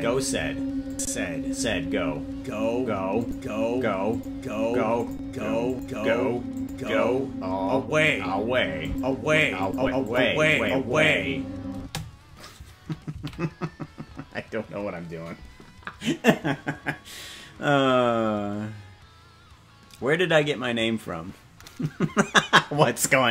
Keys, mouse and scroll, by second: 0.9 click, 3.2 click, 4.1 click, 5.0 click, 5.7 click, 6.6 click, 8.8 click, 9.6 click, 10.0 click, 10.5 click, 11.7 space, 15.6 ctrl+s.